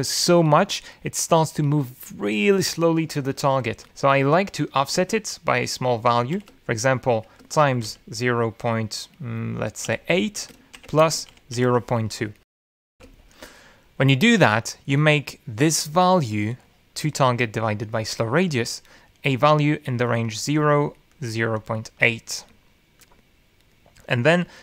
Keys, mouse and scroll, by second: 4.8 End, 7.5-9.6 typing, 11.1-13.4 typing, 14.4 shift+d, 18.4-19.9 drag, 20.5 click, 21.5 click, 22.2 click, 23.0 click, 23.8 click.